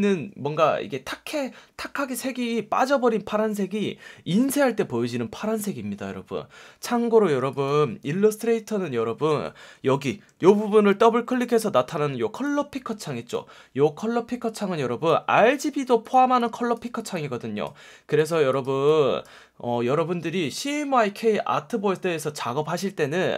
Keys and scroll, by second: 10.4 F1, 11.9 F1.